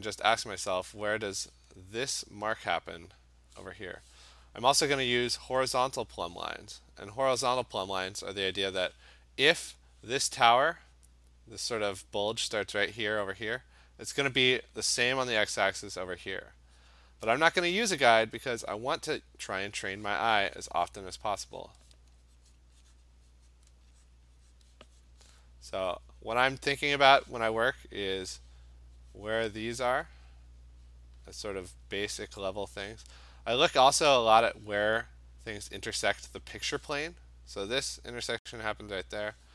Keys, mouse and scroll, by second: 1.3 click, 1.4 click, 5.0 click, 5.2 click, 5.5 click, 7.9 click, 11.4-13.0 drag, 18.5 click, 20.6 click, 21.0 click, 21.4 click, 21.7 click, 22.6 click, 23.1 click, 23.6 click, 24.1 click, 24.6 click, 25.1 click, 26.2 click, 29.6 click, 29.9 click, 32.0 click, 32.2 click, 32.4 click, 32.6 click, 32.8 click, 33.9 click, 34.3 click, 34.5 click, 35.7 click, 36.3 click, 36.6 click, 38.3 click.